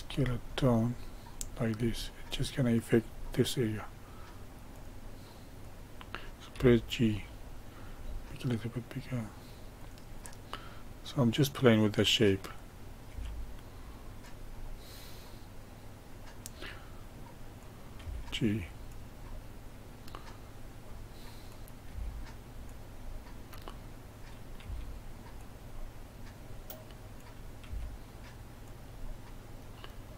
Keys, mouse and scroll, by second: 5.6 click, 6.5 g, 10.1-12.1 middle drag, 12.1 click, 13.0 g, 14.6-17.5 middle drag, 17.5 click, 17.9 g, 19.3-21.4 middle drag, 21.4 click, 21.8 g, 23.0-24.1 middle drag, 24.1 click, 24.5 g, 25.7-27.1 middle drag, 27.1 click, 27.6 g, 29.0-30.1 middle drag.